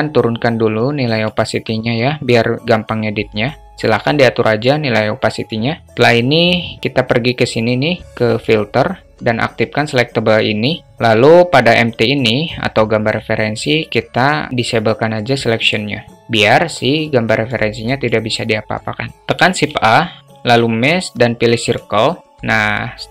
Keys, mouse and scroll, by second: 0.6 click, 1.9-4.0 drag, 7.8-10.5 drag, 15.1 click, 16.5-17.0 drag, 17.4 click, 17.7 click, 19.2 shift+a, 22.8-23.1 alt+middle drag.